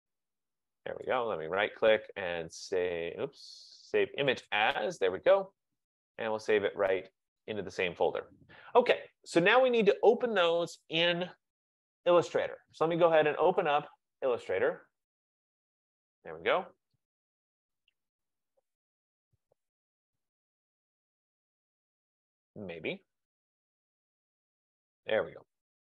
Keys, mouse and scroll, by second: 1.3 right click, 4.6 click, 7.9 click, 11.2 click, 13.5 click, 13.7 click, 15.2 click, 15.4 click, 24.1 click, 24.4 click.